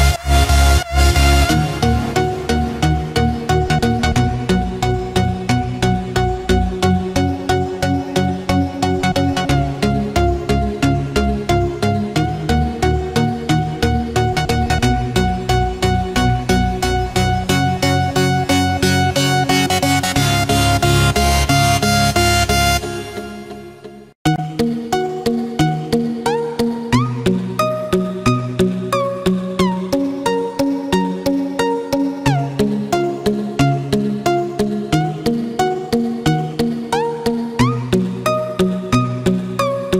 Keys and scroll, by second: 4.7 ctrl+-, 6.0 ctrl+=, 7.5 ctrl+-, 12.8 ctrl+-, 13.5 ctrl+=, 14.8 ctrl+-, 16.0 ctrl+=, 16.6 ctrl+-, 21.7 ctrl+=, 38.9 ctrl+-, 39.6 ctrl+z.